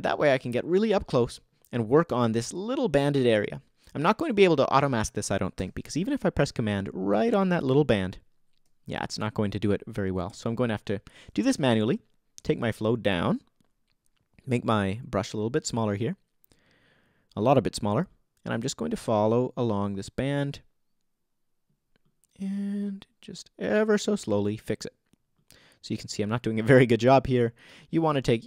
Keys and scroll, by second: 11.3 super+z.